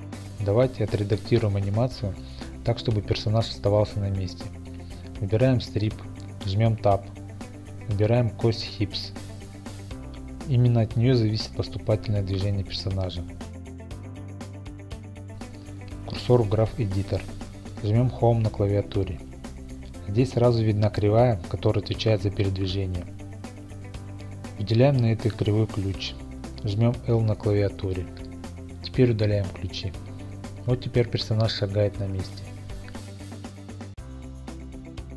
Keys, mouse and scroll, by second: 4.9 click, 6.9 Tab, 12.0-14.2 scroll, 14.2 click, 15.9 scroll, 18.3 Home, 23.5 click, 25.2 i, 27.3 x, 29.2-33.9 drag.